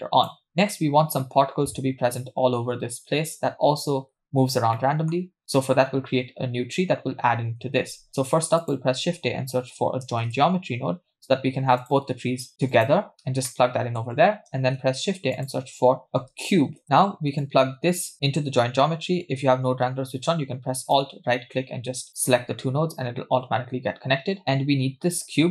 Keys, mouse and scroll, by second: 4.4-4.8 scroll down 2, 4.8 middle click, 5.4 scroll down 1, 5.6 middle click, 7.8 shift+a, 13.5 middle click, 14.6 shift+a, 17.4 click, 20.9-22.9 alt+right drag, 24.4-25.1 scroll up 3, 25.1-25.5 scroll up 2.